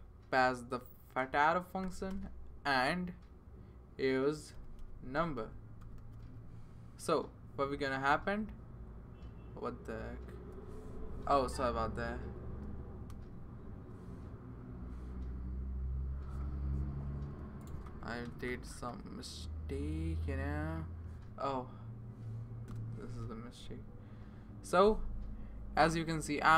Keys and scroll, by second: 1.1 space, 1.8 |, 2.1 Return, 4.5-6.7 typing, 22.7 BackSpace.